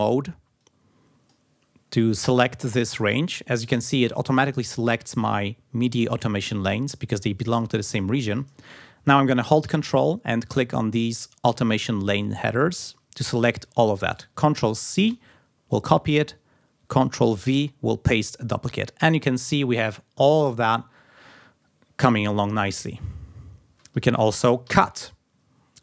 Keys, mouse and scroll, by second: 0.0 r, 1.0 click, 10.7 ctrl+click, 12.0 ctrl+click, 15.5 ctrl+c, 17.8 ctrl+v, 25.0 ctrl+x.